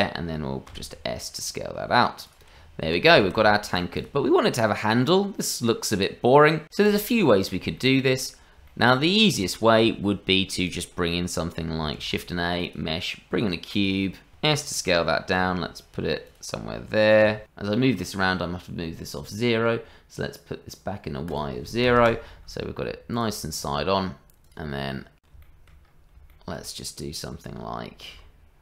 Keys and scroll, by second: 0.7 s, 2.6 Tab, 3.2 shift+z, 11.9 shift+a, 14.3 s, 15.3 g, 17.2 s, 28.1 g.